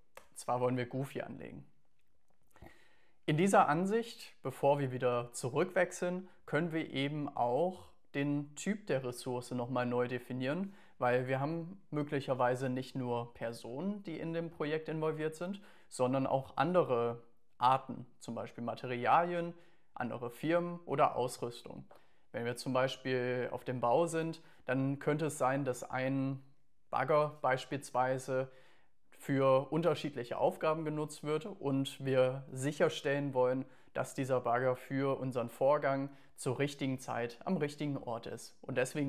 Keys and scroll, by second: 0.0-0.4 typing.